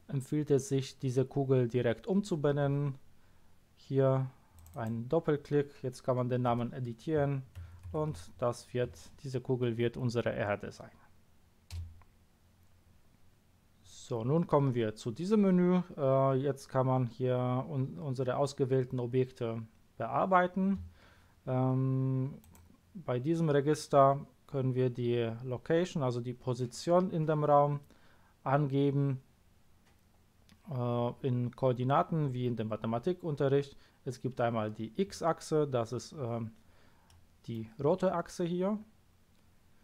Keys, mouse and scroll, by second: 4.5 click, 4.7 click, 6.5 BackSpace, 7.6 shift+e, 7.9 r, 8.1 d, 8.9 e, 11.7 Return, 22.4 click, 37.1-37.5 middle drag.